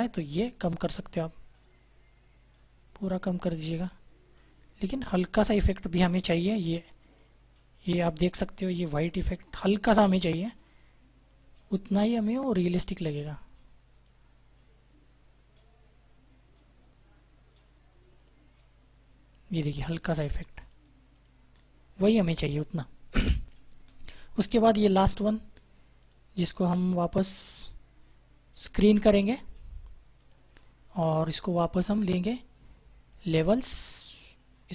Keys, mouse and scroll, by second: 24.9 click, 28.5 click.